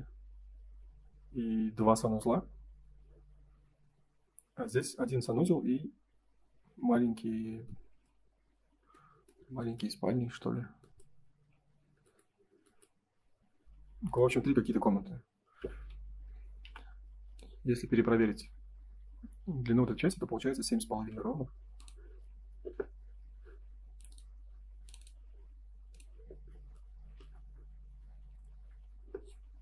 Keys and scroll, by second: 20.6 Escape, 21.1 space.